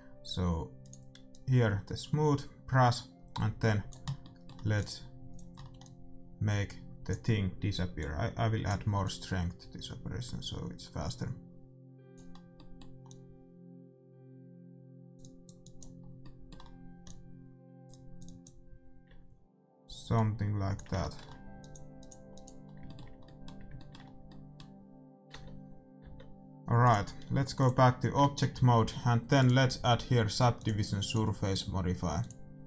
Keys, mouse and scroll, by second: 0.8-4.0 drag, 4.0 scroll down 1, 4.2-6.3 middle drag, 4.7-10.9 drag, 12.3 scroll down 1, 12.5-14.3 middle drag, 13.0-14.8 drag, 15.1-24.2 drag, 16.0-19.9 middle drag, 20.9-26.1 middle drag, 25.4 Tab, 26.1 Tab, 27.6 click, 28.1-29.4 middle drag, 28.5 a, 29.4-31.1 right drag, 30.5-32.6 drag.